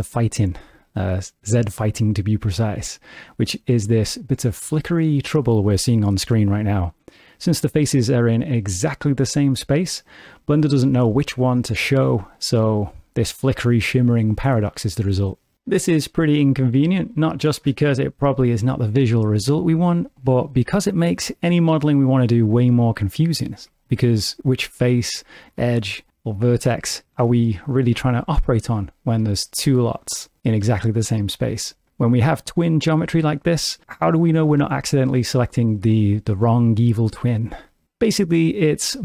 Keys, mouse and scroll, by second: 16.4 middle click, 19.0 shift+middle click, 20.1 ctrl+middle click, 22.4 middle click, 23.4 shift+middle click, 23.7 middle click, 25.5 3, 25.8 click, 29.1 1, 29.7 click, 30.7 shift+middle click, 33.1 middle click, 34.7 shift+middle click, 37.8 shift+middle click, 38.3 middle click.